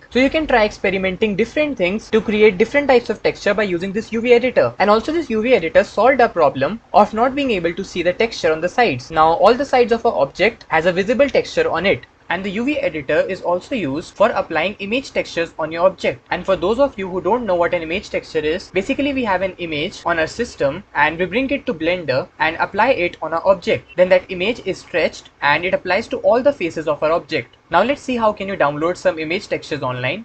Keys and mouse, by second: 9.1-10.6 middle drag, 25.4 middle click.